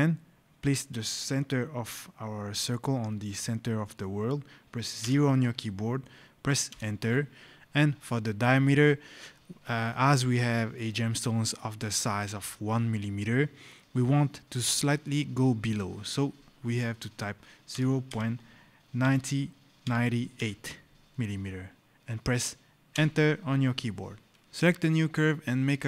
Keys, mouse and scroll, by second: 4.9 KP_0, 6.6 Return, 17.6 KP_0, 18.0 KP_Decimal, 18.9 KP_9, 20.2 KP_8, 22.8 Return.